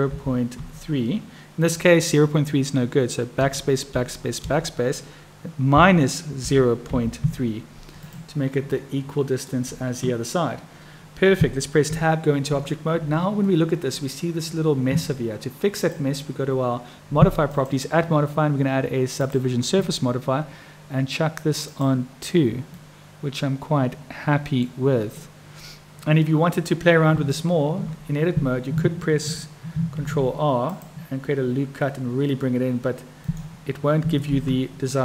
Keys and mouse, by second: 8.8 click, 11.9 Tab, 13.5 click, 15.7 click, 17.5-19.4 drag, 21.7 click, 22.9-24.7 middle drag, 27.0 Tab, 29.9 ctrl+r, 34.2 ctrl+z.